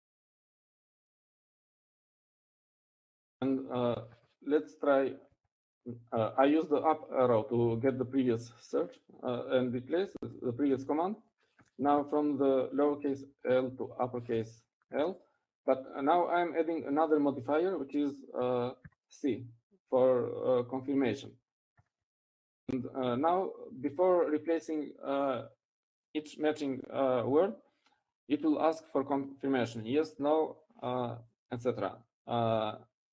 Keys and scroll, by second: 8.9 Up, 8.9 shift+;, 12.3 Left, 13.3 Left, 14.3 BackSpace, 14.6 l, 15.4 Right, 15.6 Right, 15.8 Right, 16.4 Right, 17.4 BackSpace.